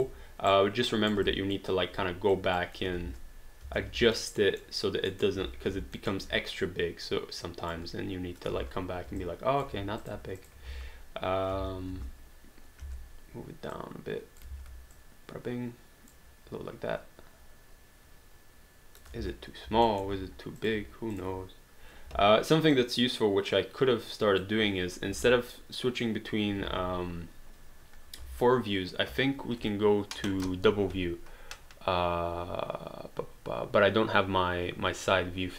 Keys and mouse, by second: 0.5 right click, 1.3 alt+click, 2.3 click, 3.0 space, 4.2 alt+middle click, 5.4 w, 6.0 alt+middle click, 6.6 click, 8.6 space, 9.6 alt+click, 9.7 q, 10.0 click, 10.4 shift+click, 10.7 space, 13.7 click, 14.5 ctrl+z, 14.9 click, 19.2 space, 19.9 alt+middle click, 20.1 q, 20.6 click, 21.1 shift+click, 22.1 w, 22.7 click, 25.1 space, 26.6 space, 28.2 space.